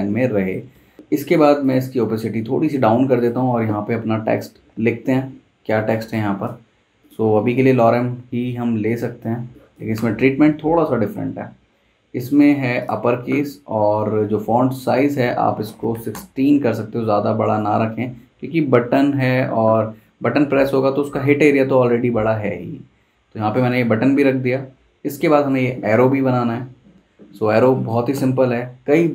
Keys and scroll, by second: 0.7 super+z, 9.2 z, 9.9 v, 15.4-15.9 typing, 16.1 Return.